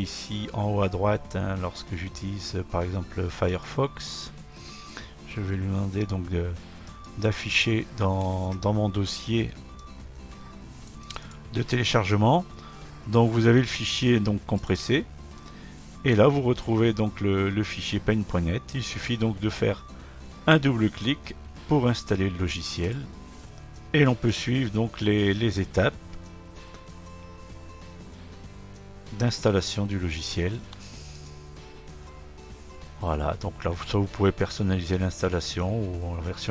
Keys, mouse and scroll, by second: 3.8-6.6 drag, 7.0-10.1 drag, 10.8 click, 11.1 click, 11.3 click, 14.6 click, 14.8 click, 22.8 click, 22.9 click, 31.2-34.2 drag.